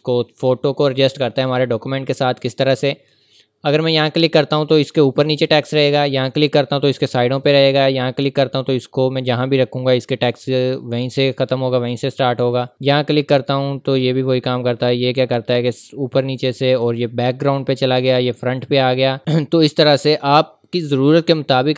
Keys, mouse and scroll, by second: 2.3 click, 6.2 click, 19.2-19.9 scroll up 1.